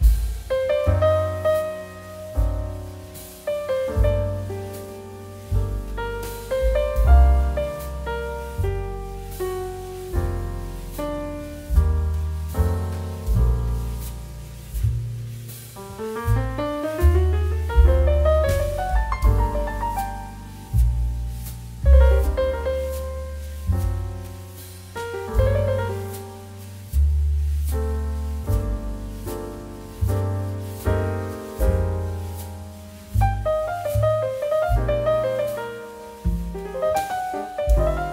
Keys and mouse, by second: 0.0-1.8 typing, 0.1 click, 1.3 click, 2.8 z, 3.4 click, 3.6 s, 4.0 click, 4.1 middle click, 4.5 g, 5.2 click, 5.4 middle click, 6.2 shift+middle click, 6.5 click, 6.8 middle click, 7.3 shift+middle click, 7.5 middle click, 8.0 shift+middle click, 10.0 click, 10.2 middle click, 10.3 shift+a, 11.3 click, 11.6 middle click, 12.9 click, 17.6 middle click, 17.8 shift+middle click, 18.8 click, 19.6 g, 20.4 click, 20.5 middle click, 21.2 g, 22.0 click, 22.1 middle click, 22.9 shift+middle click, 23.2 middle click, 23.8 Tab, 24.6 click, 24.9 g, 25.4 z, 26.0 click, 26.2 Tab, 26.7 middle click, 27.3 click, 27.7 shift+middle click, 28.0 shift+d, 28.4 middle click, 28.7 click, 28.9 middle click, 29.9 s, 31.0 shift+z, 31.6 click, 32.2 s, 33.9 click, 34.3 s, 35.3 click, 35.4 middle click, 36.1 s, 37.3 middle click, 37.8 shift+middle click, 38.0 g.